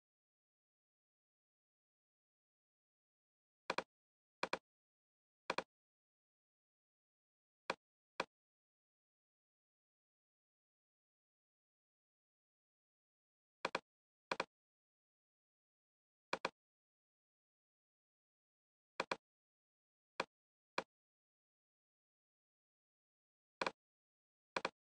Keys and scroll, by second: 10.4 shift+p, 17.7 shift+p.